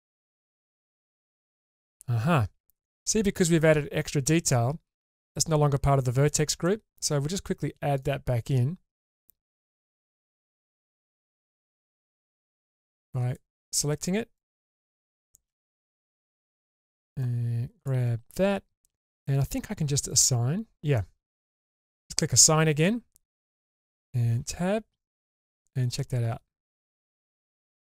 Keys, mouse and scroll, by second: 1.3 click, 2.4-2.7 scroll down 2, 2.8-6.2 middle drag, 6.6 shift+middle click, 8.0-9.6 drag, 11.8 3, 12.5 shift+click, 14.4-15.2 shift+drag, 15.8-16.6 shift+drag, 17.2-17.9 shift+drag, 20.1 click, 21.0-23.4 middle drag, 24.3 Tab, 25.6-27.9 middle drag.